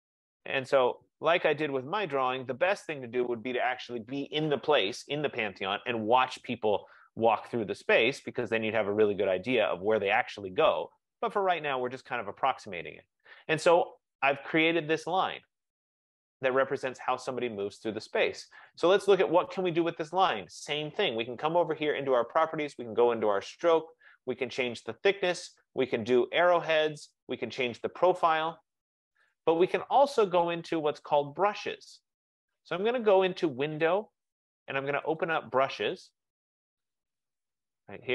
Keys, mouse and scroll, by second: 2.3 click, 10.2 click, 12.0 click, 13.5 click, 18.8 click, 20.7 click, 22.9 click, 34.0 click, 35.3 click, 37.0 click.